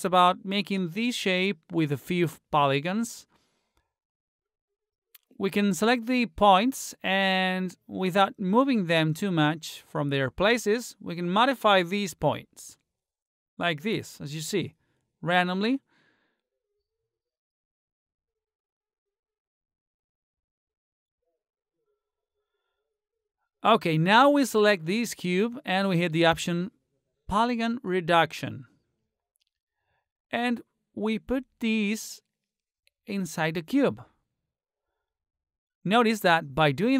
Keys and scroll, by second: 3.7 t, 5.0 space.